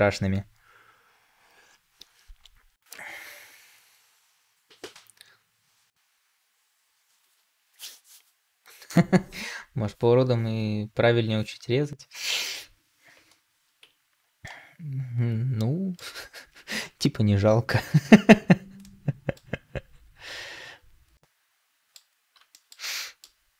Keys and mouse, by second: 14.3-15.8 middle drag, 18.7-19.3 middle drag, 21.0-21.8 middle drag, 22.4 shift+middle drag, 22.8 middle click.